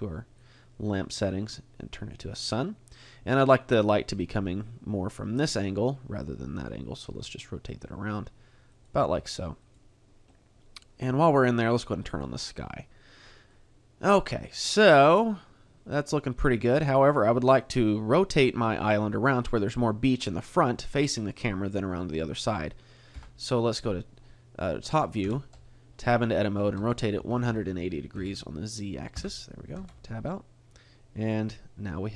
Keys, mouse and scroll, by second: 7.0 r, 8.8 click, 9.0 g, 9.7 click, 10.3 middle click, 12.1 click, 13.5 middle click, 17.6 right click, 18.6 middle click, 20.8 middle click, 23.1 KP_7, 26.8 Tab, 26.8 r, 29.8 Tab, 30.2 middle click.